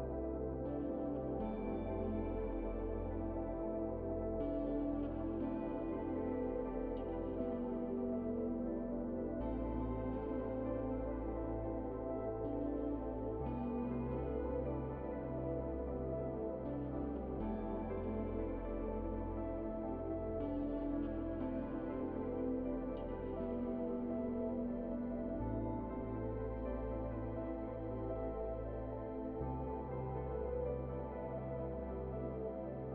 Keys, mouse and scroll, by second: 0.0-1.3 typing, 1.8 click, 3.3-5.1 typing, 5.0-11.3 drag, 11.3 right click, 11.8 shift+right click, 12.8 click, 13.3-15.9 typing, 16.0 click, 19.5 right click, 20.5 scroll up 1, 20.7 right click, 21.2 scroll up 1, 21.7 right click, 22.1-22.5 scroll up 1, 22.5 click, 22.8-23.7 typing, 24.1 click, 25.6-26.0 scroll down 1, 26.0-27.5 right drag, 27.5 scroll down 1, 27.7 scroll up 1, 27.8-29.2 right drag, 29.2-29.5 scroll down 1, 29.5 right click, 30.0-30.3 scroll up 1, 30.3 right click, 31.1 click.